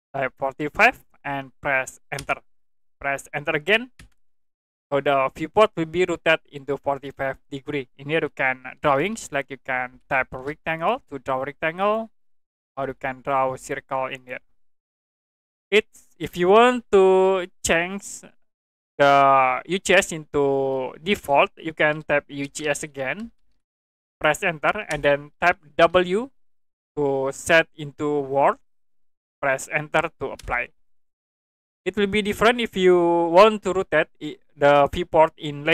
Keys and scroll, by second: 0.6 4, 0.8 5, 2.2 Return, 4.0 Return, 8.8-10.3 typing, 13.0 c, 13.5 space, 22.4-23.5 typing, 24.9 Return, 26.7 w, 30.4 Return.